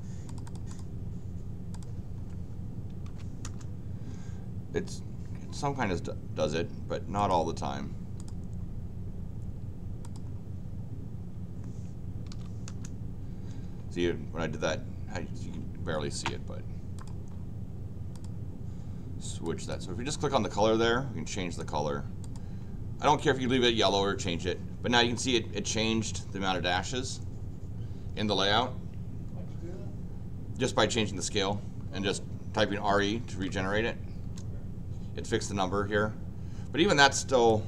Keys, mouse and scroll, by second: 0.3 click, 0.4 click, 0.7 click, 1.8 click, 2.7-3.6 typing, 6.3-6.9 scroll down 4, 7.1 click, 8.2 click, 10.0 click, 12.0-12.8 typing, 16.9 click, 18.1 click, 19.4 click, 21.6 click, 22.2 click, 32.9-33.8 typing, 34.2 Return, 37.5 click.